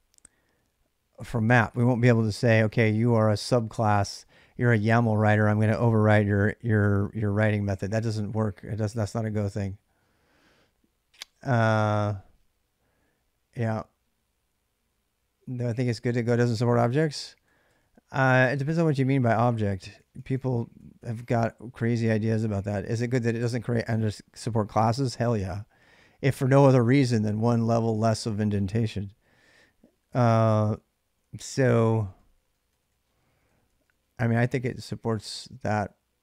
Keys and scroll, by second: 1.1-3.5 typing, 16.6-23.0 typing, 29.2 j, 29.6 k, 30.5 j, 30.8 j, 32.0-36.2 typing.